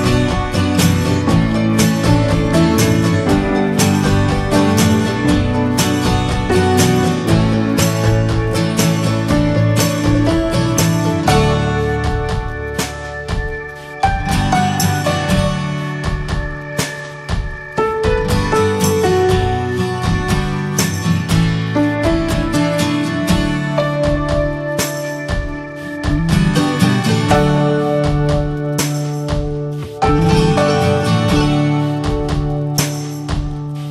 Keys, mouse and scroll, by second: 0.7 n, 1.0 middle click, 1.8-4.7 drag, 6.0 drag, 6.3 scroll up 2, 6.6-7.1 middle drag, 7.1 scroll up 1, 7.2 scroll down 2, 7.4-8.2 shift+middle drag, 8.2 a, 9.2 drag, 9.7 middle click, 10.0 click, 10.1 shift+a, 12.4 scroll up 1, 13.1-16.3 drag, 16.4 click, 16.6-17.2 right drag, 17.2 alt+middle click, 18.1-19.0 drag, 19.5-21.0 drag, 21.2 click, 21.4 click, 21.7 scroll up 1, 22.0-22.6 shift+middle drag, 22.6 click, 24.2 scroll down 2, 24.5 middle click, 24.7 ctrl+a, 25.5 middle click, 25.9 Tab, 26.8 3, 27.2 click, 28.2 click, 28.7-29.1 alt+scroll up 1, 29.1 alt+middle click, 29.8 ctrl+s, 30.1 scroll up 1, 30.3 middle click, 31.2 click, 32.0 shift+middle click, 32.8 click, 33.6 shift+middle click.